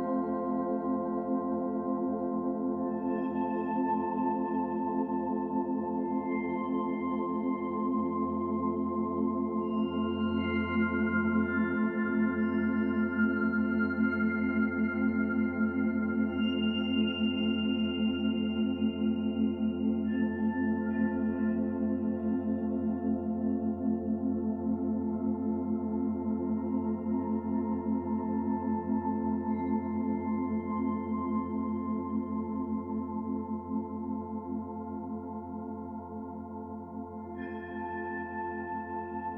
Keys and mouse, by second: 3.0 ctrl+z, 3.7 Tab, 5.1 click, 9.0 3, 9.4 click, 10.5 alt+shift+click, 11.1 ctrl+z, 11.4 ctrl+shift+click, 12.2 middle click, 13.3 ctrl+shift+click, 13.9 ctrl+shift+click, 15.6 ctrl+shift+click, 16.8 ctrl+shift+click, 17.1 middle click, 17.8 ctrl+shift+click, 18.7 ctrl+shift+click, 19.1-20.1 ctrl+shift+drag, 20.5 ctrl+shift+click, 20.9 ctrl+shift+click, 21.7 middle click, 22.2 ctrl+shift+click, 22.9 ctrl+shift+click, 23.5 middle click, 24.9 middle click, 26.4 alt+shift+2, 27.2 w, 27.7 alt+shift+click, 28.6 alt+z, 29.2 alt+shift+click, 29.5 click, 30.4 alt+z, 31.1 ctrl+b, 34.1 Tab, 34.8 alt+z, 35.0 alt+z, 35.8 middle click, 39.0-39.3 middle drag.